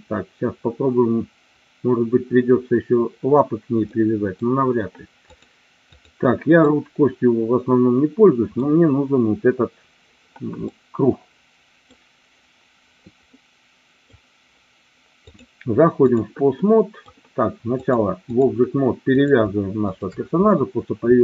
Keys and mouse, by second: 4.0 middle click, 5.2 click, 6.6-8.7 middle drag, 10.7-12.0 middle drag, 13.5-14.1 middle drag, 15.2-16.2 drag, 16.7 middle click, 17.7-18.5 drag.